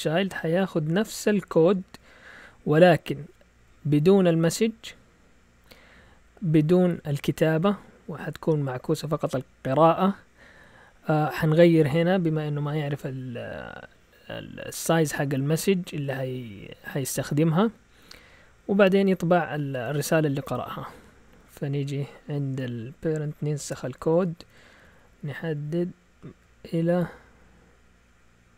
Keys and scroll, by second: 0.0-0.6 typing, 3.9-4.2 typing, 6.5 Down, 7.1 Down, 7.2 Down, 7.5 Down, 7.7 Down, 11.3 Up, 17.6 Down, 18.0-21.3 typing, 21.6 Up, 22.5 Escape, 23.6 shift+v, 23.8 Down, 23.9 Down, 24.1 Down, 24.2 Down, 24.4 Down, 24.5 Down, 24.7 Down, 24.8 Down, 24.9 Down, 25.1 Down, 25.2 Down, 25.4 Down, 26.2 Up.